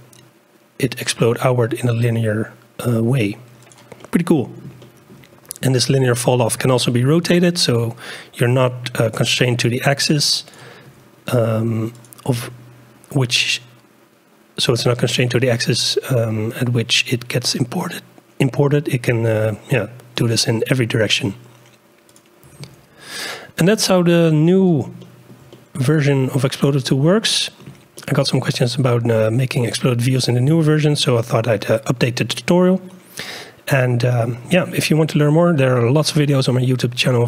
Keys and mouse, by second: 4.0-4.6 drag, 4.6 shift+middle click, 4.8-5.2 shift+drag, 5.7 shift+drag, 7.1 r, 9.5 g, 10.9 r, 12.4 g, 20.6 r, 22.5 g, 25.0-25.4 shift+drag, 25.5-27.6 drag, 27.6 shift+middle click, 28.0-28.8 shift+drag, 28.8 shift+middle click, 30.5-32.7 drag, 34.5 shift+middle click, 34.7 shift+click, 35.6 shift+middle click, 36.3 middle click.